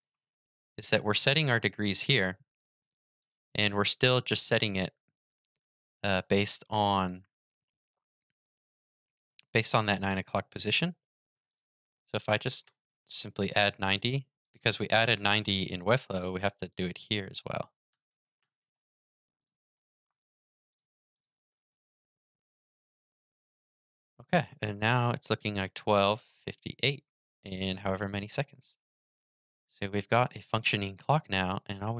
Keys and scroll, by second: 19.5 super+s, 21.2 super+r.